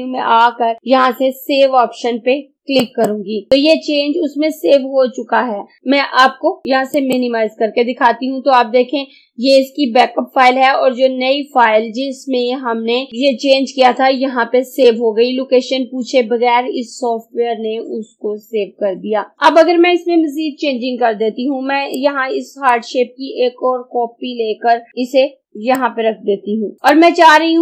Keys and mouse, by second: 2.9 click, 7.0 click, 19.4 click, 22.0-25.6 drag, 25.6 ctrl+right click.